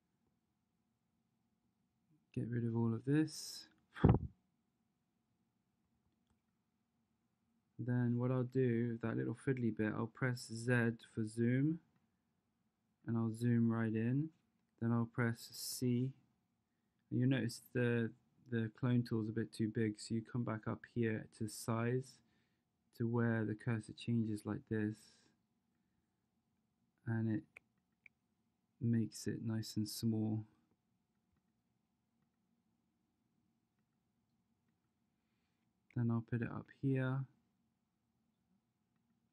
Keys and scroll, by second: 10.4 z, 15.7 c.